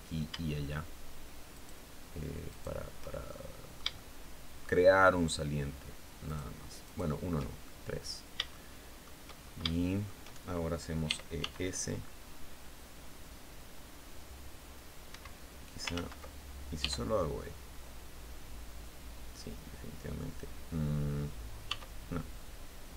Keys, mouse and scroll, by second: 1.0 shift+right click, 1.9 shift+right click, 2.7-4.2 shift+middle drag, 5.7 shift+right click, 6.3 shift+right click, 7.1-8.7 shift+middle drag, 8.8-9.1 shift+scroll down 2, 9.1 shift+middle click, 10.5 e, 10.8 s, 14.5 Escape, 15.4 ctrl+z, 16.2 e, 21.1 s.